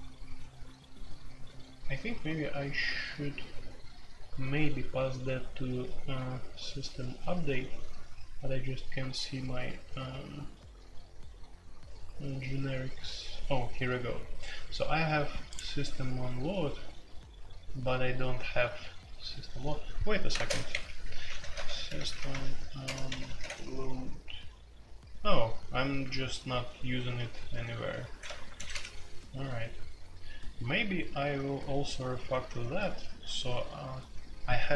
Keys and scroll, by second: 20.3-23.4 typing, 28.3 ctrl+g.